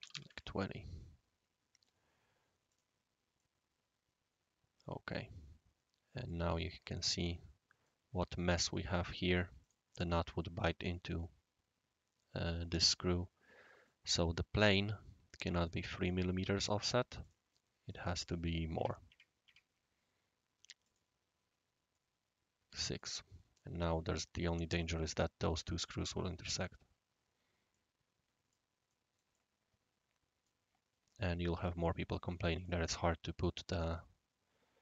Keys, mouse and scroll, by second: 0.0-0.5 typing, 1.0-2.7 right drag, 2.7 click, 2.9-3.6 typing, 3.4-6.3 middle drag, 6.4-7.1 typing, 6.5 middle click, 6.6-7.9 right drag, 8.2-9.0 scroll up 1, 8.4-9.2 typing, 9.0 scroll down 1, 9.0-9.6 scroll up 1, 9.6-10.3 drag, 11.6-12.4 typing, 12.9-13.4 scroll down 3, 13.6 middle drag, 14.0 click, 15.6 click, 16.6 click, 17.2 click, 17.9 click, 18.2 click, 20.8 shift+click, 21.9-23.0 right drag, 27.1 scroll up 1, 27.1-27.5 scroll down 2, 27.7-28.5 right drag, 28.9-30.3 middle drag, 29.3-30.5 right drag, 30.8-31.4 scroll up 1, 32.5 click.